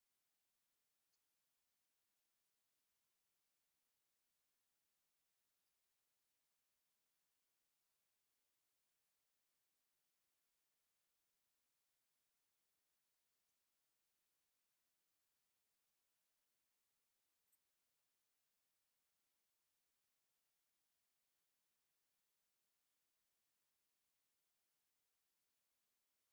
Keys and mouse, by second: 0.7-9.7 drag.